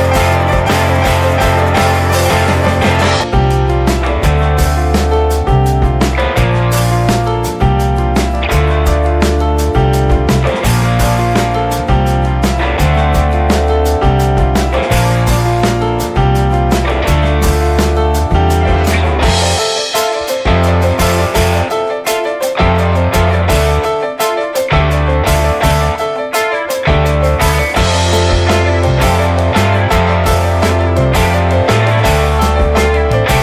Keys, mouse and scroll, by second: 0.0 middle click, 0.1 scroll up 1, 0.3 shift+middle click, 0.7-1.9 right drag, 1.9-2.4 drag, 3.5-4.1 drag, 4.1-5.5 middle drag, 5.5-9.5 drag, 10.0 drag, 10.3 scroll up 2, 10.6-10.9 middle drag, 10.9 click, 11.1 scroll down 2, 11.3-12.0 shift+middle drag, 12.0 shift+h, 12.6 `, 14.4 click, 15.1-16.8 middle drag, 16.8-18.5 drag, 22.0-27.5 middle drag, 27.5-29.6 drag.